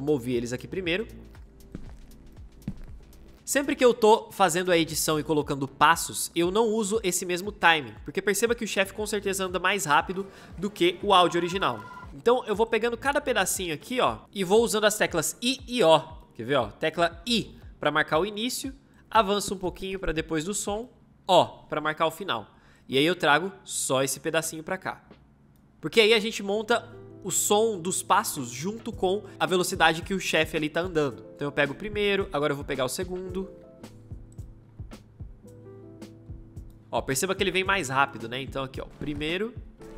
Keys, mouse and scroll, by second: 1.0 space, 9.9 space, 17.1 i, 21.1 o, 33.7 i, 34.5 o, 36.8 space, 38.7 space.